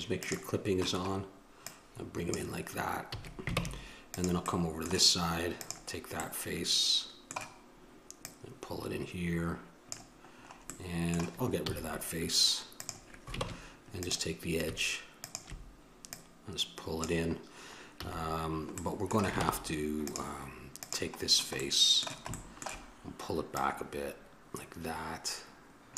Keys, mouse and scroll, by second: 3.3 a, 3.8 ctrl+Tab, 5.8-7.2 right drag, 7.2-8.9 drag, 10.6-13.1 middle drag, 13.6 ctrl+Tab, 15.4-18.2 drag, 18.2 a, 19.0 middle click, 19.6 ctrl+Tab, 21.0-22.0 right drag, 23.7-25.9 drag.